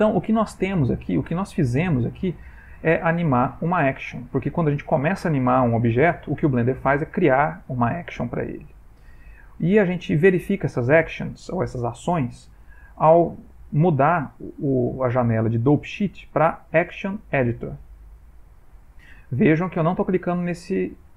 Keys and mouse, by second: 1.4 click, 15.9 click, 21.0 click.